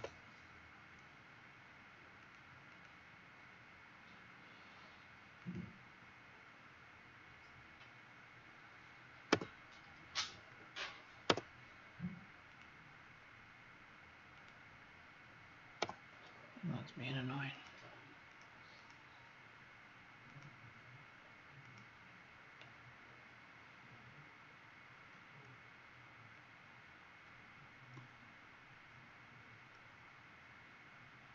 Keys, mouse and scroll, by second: 0.0-0.4 typing, 2.2 click, 2.6 click, 5.3 click, 9.3 Return, 11.2 BackSpace, 12.4 click, 15.8 Delete, 17.5 click, 18.7 click, 20.2 click.